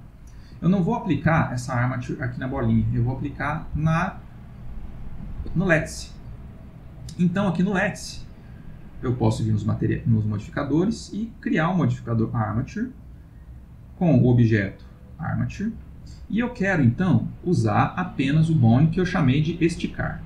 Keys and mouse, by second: 1.3 g, 3.2 click, 3.7 g, 8.8 click, 10.8 click, 14.3 click, 17.6 click.